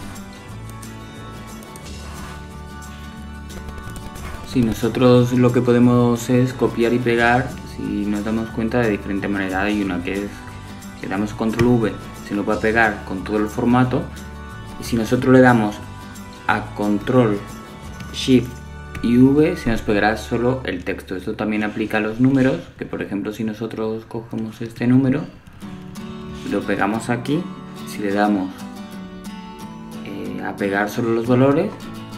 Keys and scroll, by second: 8.7 super+c, 12.6 super+v, 22.0 shift+super+v.